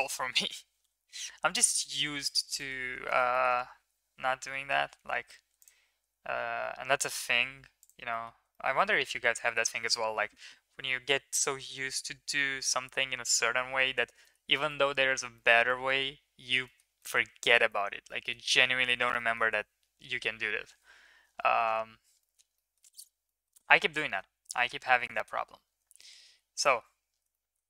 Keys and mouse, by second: 0.4 s, 2.6 middle click, 3.1 middle click, 8.1 middle click, 8.6 shift+middle click, 8.8 middle click, 15.5 shift+middle click, 16.6 shift+middle click, 19.1 middle drag, 20.8 KP_7, 22.3 middle click, 22.7 middle click, 23.4 middle click, 24.1 shift+middle click, 24.6 middle drag, 26.1-26.5 shift+middle drag, 26.8 shift+middle drag, 27.4 shift+middle drag.